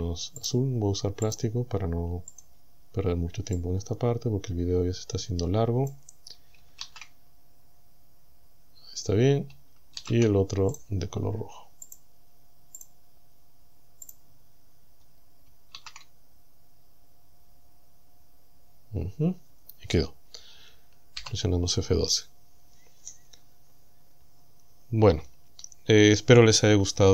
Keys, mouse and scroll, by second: 0.4 click, 1.3 click, 2.4 click, 3.6-6.1 drag, 6.8 shift+z, 10.0 shift+z, 10.8 right click, 11.9 click, 12.8 click, 14.1 click, 15.8 shift+z.